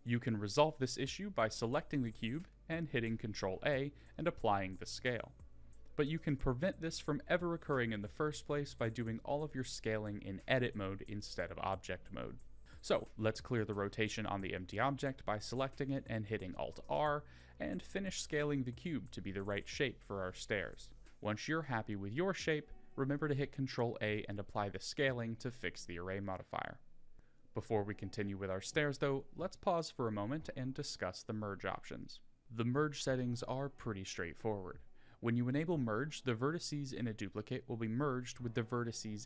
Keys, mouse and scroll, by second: 0.1 ctrl+a, 5.3-10.5 middle drag, 13.3 click, 14.7 alt+r, 16.9 Tab, 17.4 click, 18.8 s, 22.9 KP_1, 23.8-24.2 scroll up 5, 24.5 s, 28.2 ctrl+a, 32.2 n, 38.2 click.